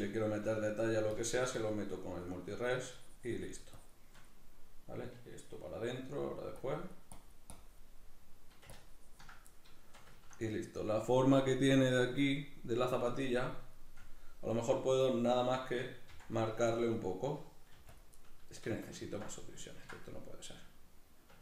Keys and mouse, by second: 0.7 middle click, 1.2-2.5 ctrl+drag, 2.5 middle click, 2.9-4.3 shift+drag, 4.3-6.6 middle drag, 6.6-8.0 drag, 8.0 middle click, 8.8 ctrl+click, 9.5-16.1 middle drag, 16.1 c, 16.7-18.0 drag, 17.7 f, 18.2-21.4 middle drag.